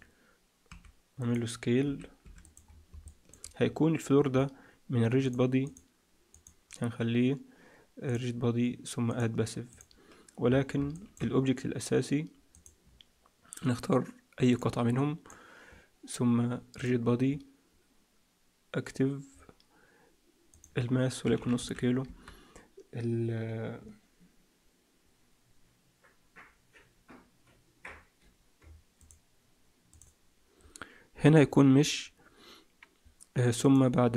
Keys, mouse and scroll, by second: 0.6 s, 1.8 s, 2.6-3.0 scroll down 5, 3.0 middle click, 4.2-4.8 scroll down 1, 4.8-5.2 scroll down 3, 5.2 click, 5.6 click, 6.2 click, 8.0 click, 9.0 click, 10.4-10.8 scroll up 6, 10.8 shift+middle click, 11.2-12.0 scroll up 1, 12.0-12.4 scroll up 1, 12.4 click, 14.5 click, 16.7 click, 19.2-20.4 scroll down 4, 20.4 click, 34.0-34.1 scroll down 5.